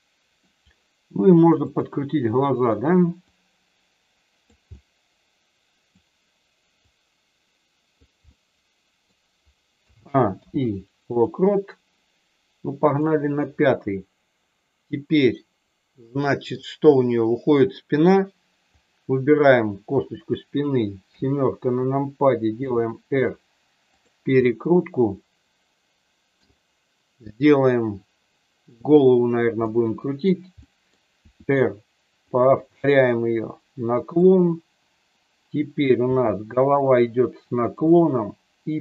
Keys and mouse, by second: 1.5 click, 3.3-4.4 drag, 4.7-5.9 middle drag, 6.8-7.9 drag, 8.3 middle click, 9.8 a, 10.3 i, 12.9 click, 15.9 middle click, 21.0 KP_7, 22.5 r, 24.4-26.4 middle drag, 28.8 click, 29.5 middle click, 30.6 middle click, 31.2 r, 32.3 click, 32.7 middle click, 33.4 middle click, 36.0 r, 37.7 click.